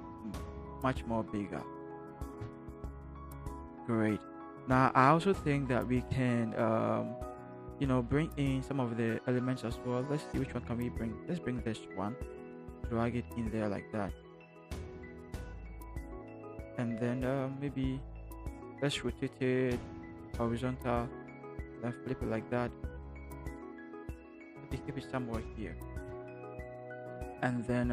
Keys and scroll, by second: 2.2 alt+shift+Return, 25.9 Return.